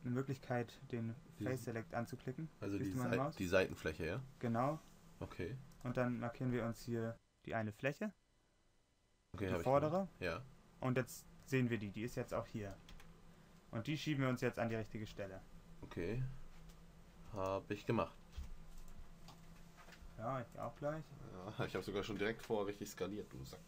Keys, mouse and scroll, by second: 7.1 middle click, 15.5 g, 19.7 s, 21.1 g.